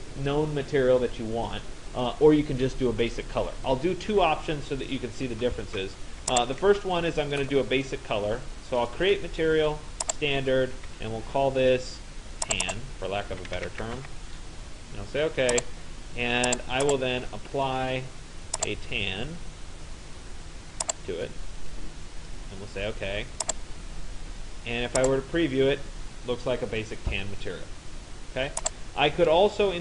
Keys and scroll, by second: 13.1 shift+t, 13.7 a, 14.0 n.